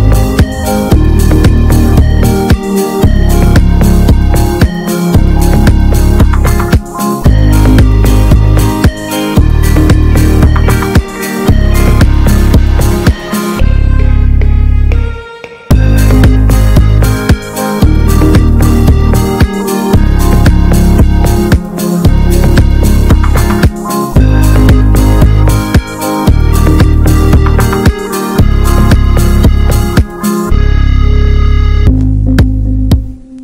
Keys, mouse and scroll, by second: 1.8 middle click, 2.0 scroll up 1, 2.2-3.4 shift+middle drag, 6.0 middle click, 6.4 s, 8.5-9.5 alt+middle drag, 9.5 ctrl+b, 11.3 middle click, 12.4 s, 15.6-18.0 middle drag, 18.0 ctrl+b, 22.0 scroll down 2, 22.2 Tab, 22.5-23.1 middle drag, 23.1 click, 23.2-23.6 right drag, 23.6 scroll down 1, 23.8-24.7 middle drag, 24.7-25.1 scroll up 2, 25.1 middle click, 25.5 Tab, 25.8 middle click, 26.2 scroll down 2, 26.5 middle click, 26.7 scroll up 2, 27.2 ctrl+z, 27.4 ctrl+z, 27.9 middle click, 28.1 ctrl+z, 28.3 ctrl+z, 28.8 ctrl+z, 29.6 alt+middle click, 29.9 alt+z, 30.3 shift+middle click, 30.8 s.